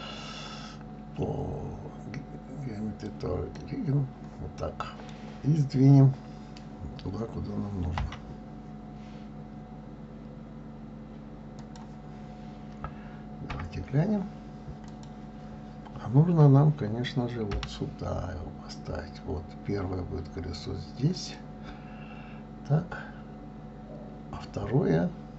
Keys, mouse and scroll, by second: 4.6-7.6 middle drag, 8.0 g, 13.5 KP_3, 14.9 click, 17.5 g.